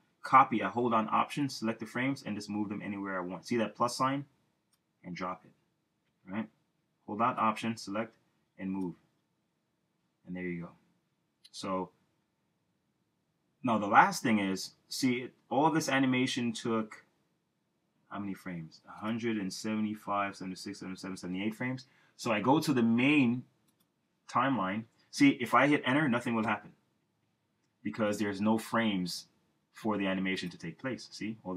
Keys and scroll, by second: 6.4 super+z, 26.6 super+Return.